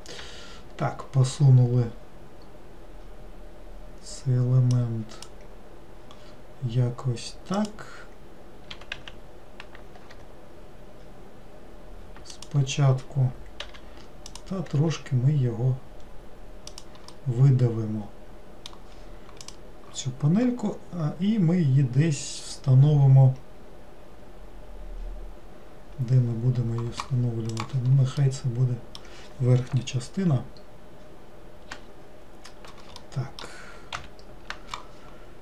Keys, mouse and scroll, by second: 7.6 click, 14.4 click, 17.2-20.4 middle drag, 28.3-31.4 middle drag, 33.1 middle click, 34.0 ctrl+l.